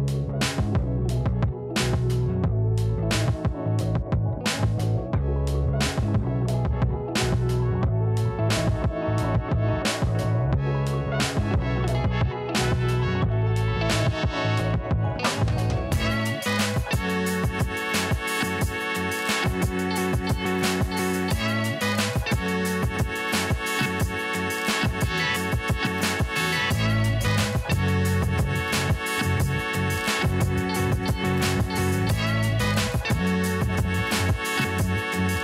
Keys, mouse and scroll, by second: 0.0 right click, 0.4 click, 1.1 right click, 1.9 click, 2.6-3.1 scroll down 1, 3.1 click, 3.4-3.7 alt+scroll down 1, 4.4 click, 8.2 ], 8.8 click, 9.6 ctrl+z, 11.4 click, 13.7-15.5 typing, 15.8 click, 21.9 click, 25.3 ctrl+z, 27.5 [, 28.2 click, 29.8 alt+scroll up 1, 30.2-31.0 scroll down 2, 31.0-32.2 alt+scroll up 2, 32.8-34.7 scroll up 1, 34.7 click.